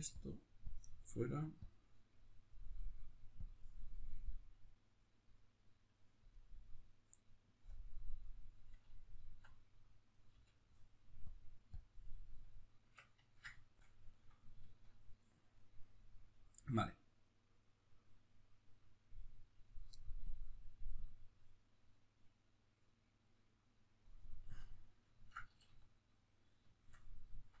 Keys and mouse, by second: 0.2-2.3 drag, 9.1-10.3 alt+right drag, 10.3 l, 11.3 click, 11.8 click, 12.4-20.9 middle drag, 12.8 Tab, 20.9 click, 24.5-27.6 middle drag, 25.5 a.